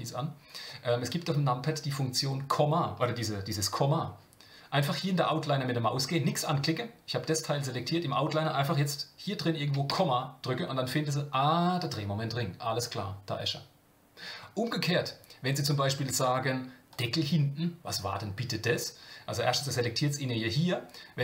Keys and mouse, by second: 9.9 KP_Decimal, 16.9 click.